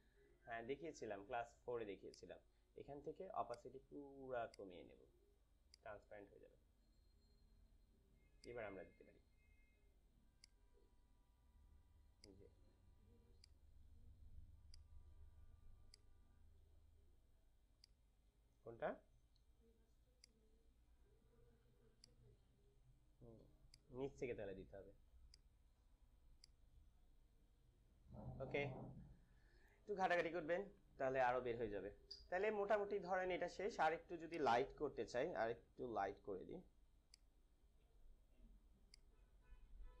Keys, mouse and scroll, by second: 2.0-29.3 drag, 29.3 ctrl+-, 34.2 click, 35.5 ctrl+l, 37.0-40.0 drag.